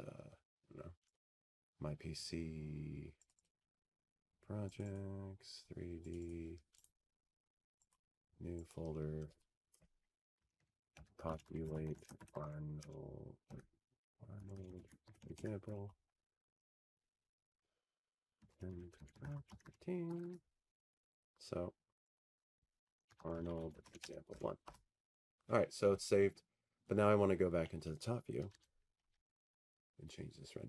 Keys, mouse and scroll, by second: 2.9-6.2 drag, 6.8-8.9 drag, 10.4 click, 10.7 click, 11.8 click, 12.0 click, 12.4 click, 13.5 right click, 14.5 click, 15.7-25.7 typing, 16.0 click, 25.8 Return, 28.2 click, 28.6-30.5 typing, 28.9 click.